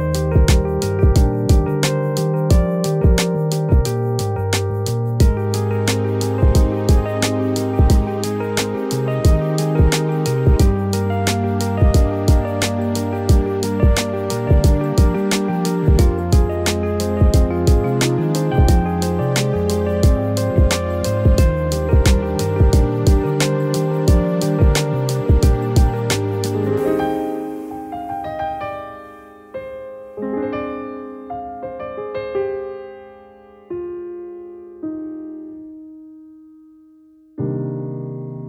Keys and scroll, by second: 23.4 ctrl+z, 33.8 ctrl+z, 34.8 ctrl+z, 38.1 ctrl+z.